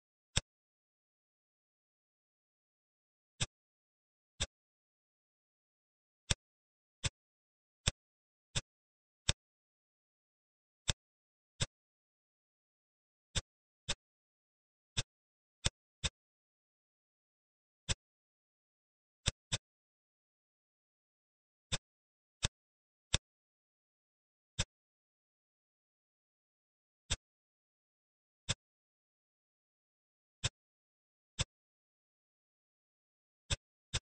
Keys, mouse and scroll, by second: 0.3-1.4 middle drag, 1.4-2.1 scroll up 3, 2.1-3.3 scroll down 1, 3.3-4.4 drag, 5.6 ctrl+r, 7.8 click, 8.4 click, 9.2 click, 10.7 click, 11.5 click, 13.3 click, 13.8 click, 14.9 shift+click, 15.5 shift+click, 16.0 shift+click, 16.7 e, 18.4-19.1 scroll down 4, 19.1 click, 19.5-21.0 middle drag, 21.4 Tab, 21.6 click, 22.0 scroll up 1, 22.3-22.7 middle drag, 22.7 scroll up 1, 23.0 middle click, 23.5 scroll up 1, 24.0-24.5 scroll down 2, 24.5-26.0 middle drag, 27.0-29.1 drag, 29.1-30.3 scroll up 2, 30.3 middle click, 31.3 click, 31.8 Tab, 33.4 click, 33.8 shift+click.